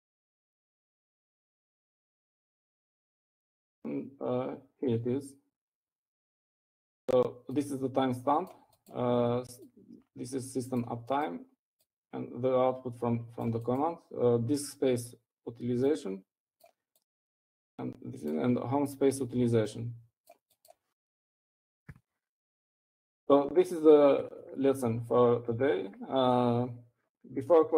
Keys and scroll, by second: 0.0-0.6 typing, 1.7-4.1 typing, 23.2-23.9 typing.